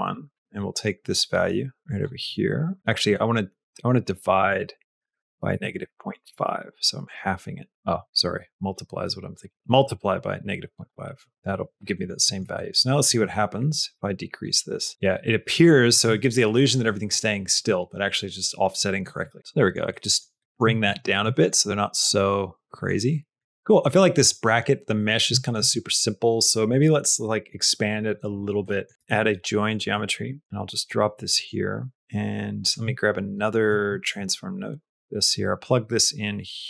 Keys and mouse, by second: 0.5 middle click, 2.4 middle click, 3.0-4.4 drag, 4.9-6.8 drag, 7.0 click, 7.7-9.4 drag, 10.7 click, 11.9 middle click, 12.6 middle click, 12.9 middle click, 13.4 middle click, 14.5-15.8 shift+drag, 16.2 middle click, 16.7 middle click, 19.4 middle click, 19.8 middle click, 20.3 middle click, 21.2 shift+middle click, 21.9 middle click, 22.9 middle click, 23.4 middle click, 24.2 middle click, 24.8 middle click, 25.2 shift+middle click, 28.6 middle click, 28.9 shift+a, 31.2 click, 31.8 middle click, 32.5 click, 33.7 click, 33.9 shift+a, 34.8 middle click, 35.7-36.6 drag.